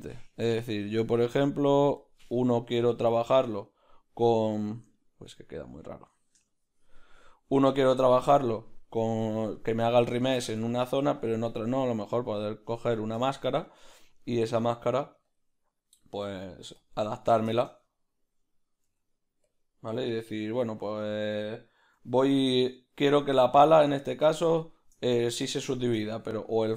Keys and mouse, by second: 2.6-5.8 middle drag, 11.9-23.3 ctrl+middle drag, 12.9 Tab, 14.6 s, 17.1 q, 17.4 q, 18.8 s, 23.3 g, 23.3 q, 24.5-26.7 shift+middle drag, 25.1 g, 26.0 g.